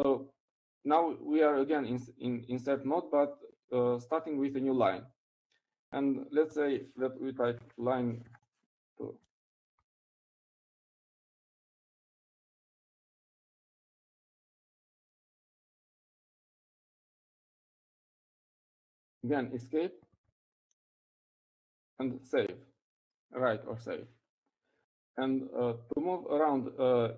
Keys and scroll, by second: 0.7 o, 9.1-21.5 typing, 22.7-25.3 typing, 26.9-27.1 typing.